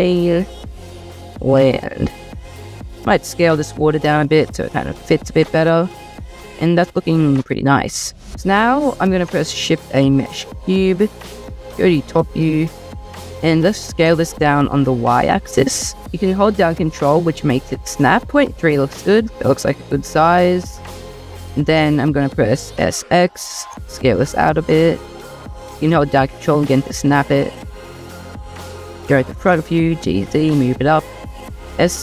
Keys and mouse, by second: 0.5-2.7 drag, 3.5 s, 5.1 middle click, 5.4 click, 5.6-6.2 middle drag, 7.0 middle click, 7.2 middle click, 9.4 shift+a, 12.1 click, 13.4 s, 13.6 z, 14.7 y, 20.6 drag, 22.8 s, 22.9 x, 27.0 middle click, 28.3 click, 29.4 g, 29.5 z, 30.5 click, 31.1 s, 31.3 z.